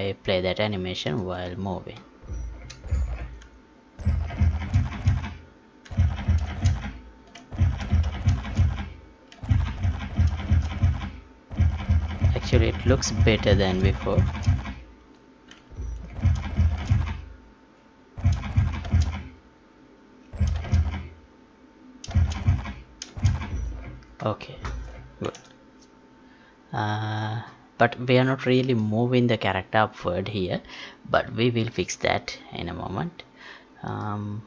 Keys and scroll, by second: 4.8 space, 6.4 space, 8.3 space, 11.6 space, 16.6 space, 18.8 space, 20.5 space, 22.1 space, 25.2 ctrl+p.